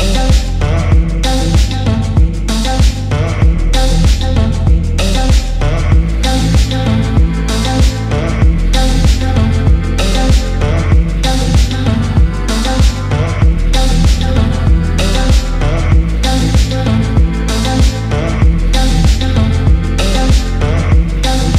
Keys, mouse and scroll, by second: 0.0 alt+shift+click, 0.5-1.7 middle drag, 1.7-2.6 scroll down 1, 2.6-4.8 drag, 5.8-7.0 drag, 7.9 middle click, 9.2 click, 10.0 alt+click, 11.0 alt+shift+click, 12.0 alt+shift+click, 12.7 middle click, 14.1 alt+shift+click, 15.3 alt+shift+click, 16.7 alt+shift+click, 17.6 alt+shift+click, 19.3 alt+shift+click, 20.7 alt+shift+click.